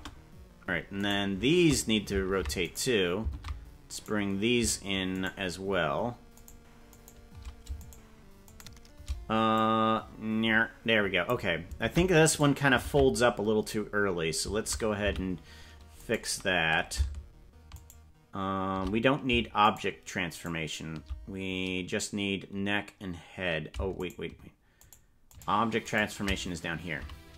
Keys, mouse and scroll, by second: 0.0 space, 1.2 right click, 2.4 ctrl+Tab, 2.8 right click, 3.4 ctrl+Tab, 4.2 right click, 5.4 shift+right click, 6.6 right click, 9.6-11.3 drag, 12.0 ctrl+Tab, 12.4 right click, 13.0 ctrl+Tab, 15.2 a, 16.0 right click, 18.0 shift+right click, 19.7 shift+right click, 24.0 shift+right click, 24.8 shift+right click, 27.0 g.